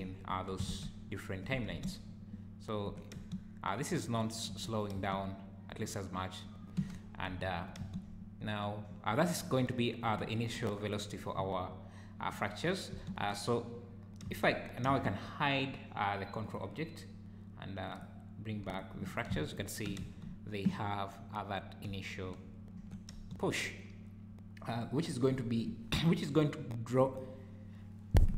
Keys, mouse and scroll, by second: 0.7 ctrl+Tab, 1.7 space, 2.9 Escape, 3.2 space, 4.5 Escape, 5.0 space, 6.8 Escape, 7.8 space, 10.2 `, 12.9 space, 14.3 space, 14.9 space, 16.5 click, 18.3 click, 18.8 click, 19.5 shift+right click, 20.0 space, 22.8 Escape, 23.1 space, 25.3-26.8 scroll up 2, 26.8 scroll up 1.